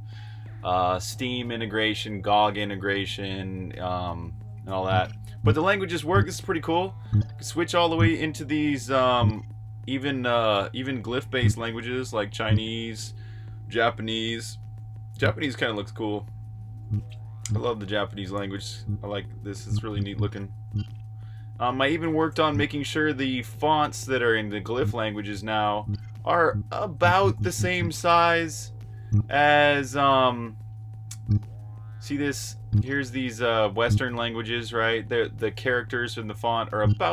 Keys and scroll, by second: 4.6-8.6 typing, 11.2 l, 14.9 s, 15.5 s, 16.6 Escape, 17.2 j, 18.5-20.4 typing, 21.9-22.7 typing, 24.5 s, 25.5-29.4 typing, 31.0-34.1 typing, 36.2-37.1 typing.